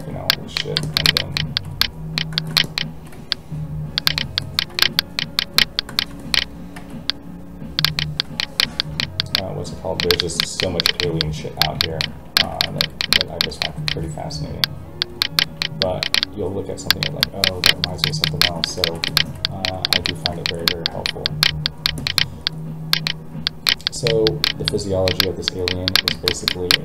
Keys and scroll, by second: 3.1 alt+a, 6.7 alt+a, 13.9 alt+a.